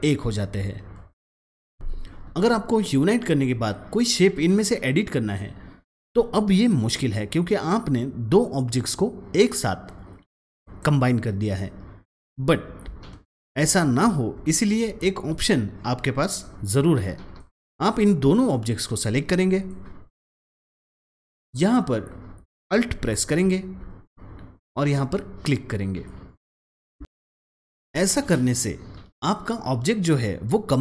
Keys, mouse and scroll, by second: 7.8-14.3 drag, 10.0 click, 14.3 ctrl+z, 17.3-22.0 drag, 17.8-19.6 drag, 23.7-26.7 drag.